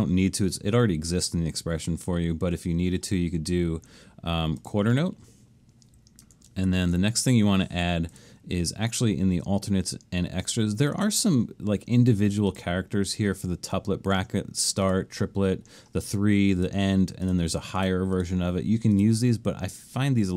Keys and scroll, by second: 6.7 alt+shift+super+s.